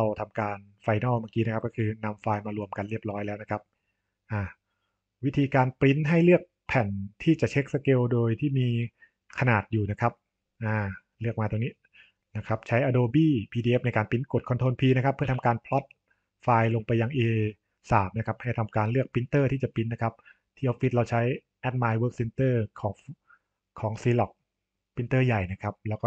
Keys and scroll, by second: 15.1 ctrl+p.